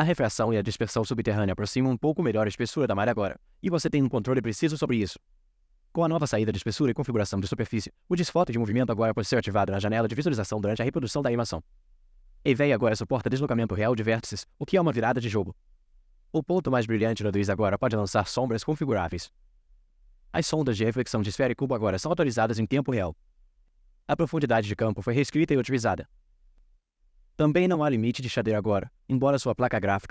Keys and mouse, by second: 24.7-27.4 shift+middle drag.